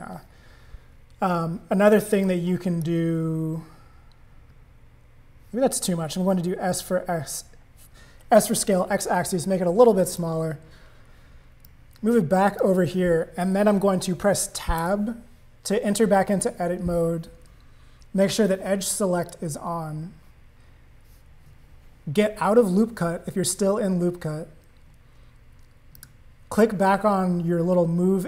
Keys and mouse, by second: 2.2 click, 6.4 s, 11.6 click, 14.8 Tab, 19.2 click, 26.0 click.